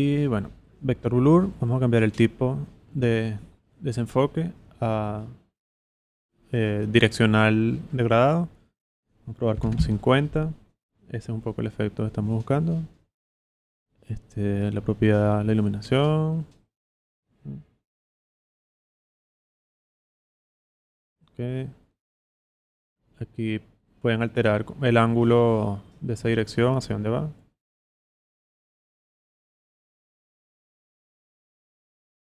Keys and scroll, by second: 9.3-10.1 typing.